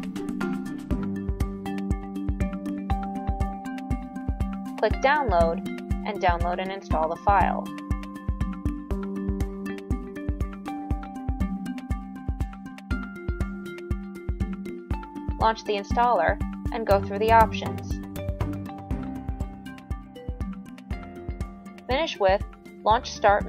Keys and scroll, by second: 0.0-0.7 typing.